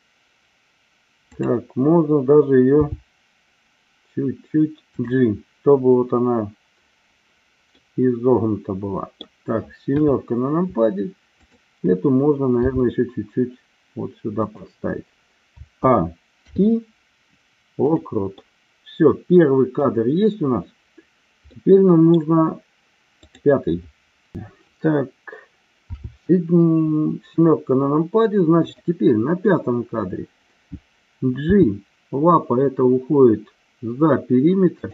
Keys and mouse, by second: 2.7 g, 5.0 drag, 7.8-9.2 middle drag, 10.0 KP_7, 12.7 g, 14.3 click, 15.4 a, 16.3 i, 18.3-19.7 middle drag, 21.6 middle click, 23.3 click, 26.1 KP_7, 28.7 click, 31.5 g, 34.8 click.